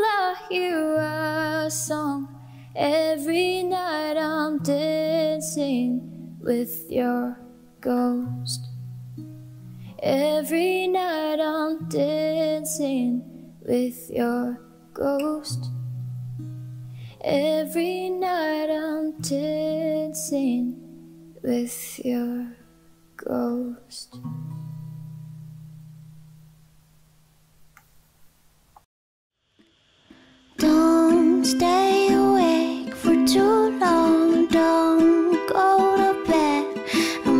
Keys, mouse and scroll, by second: 15.6 s, 22.1 p, 28.0 s, 29.6 5, 29.9 1, 33.6-34.4 typing, 36.7-37.3 typing.